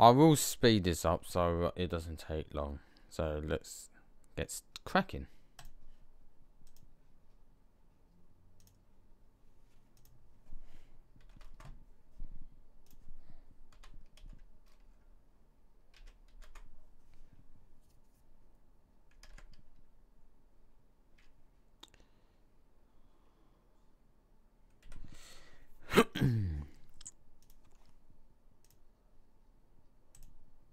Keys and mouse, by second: 5.5 middle click, 6.6-7.2 drag, 12.8 middle click, 19.1 alt+a, 24.5 click, 24.7 Escape, 27.5-28.6 drag.